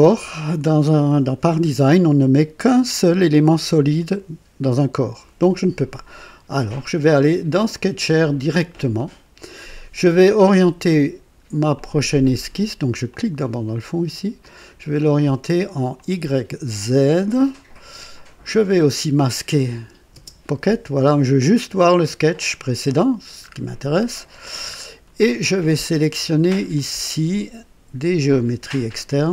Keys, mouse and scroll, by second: 7.5 click, 9.0 click, 11.7 click, 13.1 click, 14.4 click, 15.9 click, 16.8 click, 18.5 click, 19.7 click, 20.1 space, 23.4-23.7 scroll up 2, 24.0-24.6 right drag, 24.7 scroll up 2, 25.3-26.0 right drag, 26.8 click.